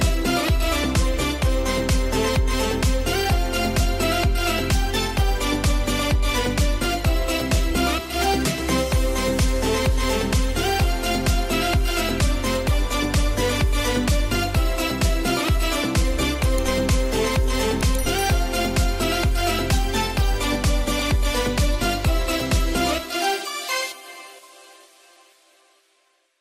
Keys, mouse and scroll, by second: 0.6 click, 1.0 click, 1.9 ctrl+0, 4.0 click, 4.7 space, 4.8 click, 5.2 space, 5.7 click, 9.5 scroll up 1, 9.7 space, 9.9 click, 10.2 space, 11.0 scroll down 1, 11.7 scroll up 1, 13.8 space, 13.9 click, 14.3 space, 14.8 space, 15.5-16.7 drag, 16.7 scroll down 1, 17.1 scroll up 1, 17.2 space, 17.3 click, 17.7 space, 18.0 space, 18.4 space, 21.4 F12.